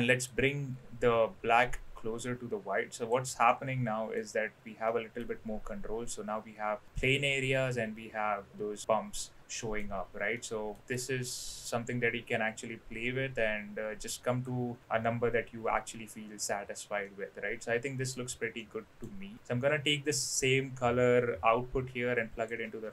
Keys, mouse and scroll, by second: 0.3-3.1 drag, 3.4-4.2 middle drag, 4.9-5.2 middle drag, 8.5-9.8 middle drag, 10.3-10.8 middle drag, 11.0-14.4 drag, 14.8-16.4 drag, 17.0-18.1 middle drag, 18.5 middle click, 19.3-22.5 drag.